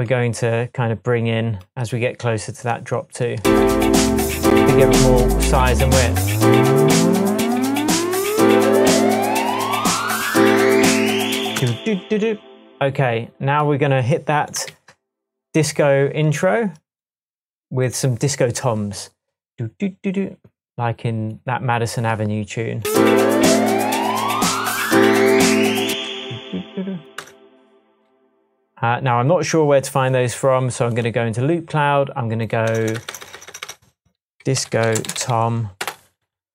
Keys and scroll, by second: 3.4 space, 11.5 space, 14.7 super+s, 25.9 space, 27.1 BackSpace, 32.6 BackSpace, 34.3-35.7 typing, 35.8 Return.